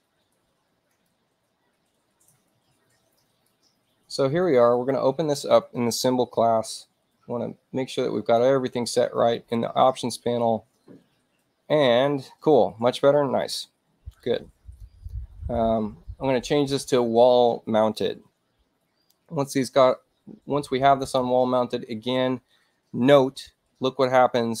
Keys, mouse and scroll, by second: 0.9 click, 3.1 right click, 4.7 click, 7.8 click, 9.3 click, 13.4 click, 14.7 click, 16.5 click, 21.0 click.